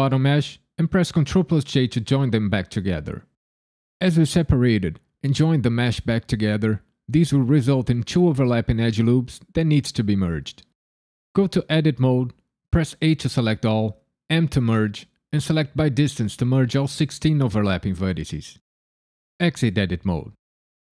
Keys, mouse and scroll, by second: 1.6 ctrl+j, 11.3 Tab, 13.0 a, 14.3 m, 19.4 Tab.